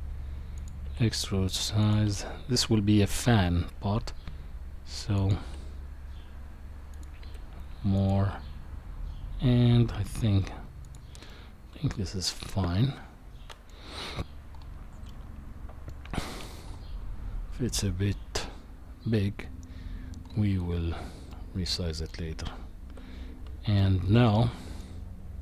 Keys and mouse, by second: 0.8 s, 2.0 e, 5.4 s, 7.2 e, 8.2 s, 11.3-13.7 middle drag, 15.1 middle click, 21.3 middle click, 22.3 Tab, 23.8-24.8 middle drag.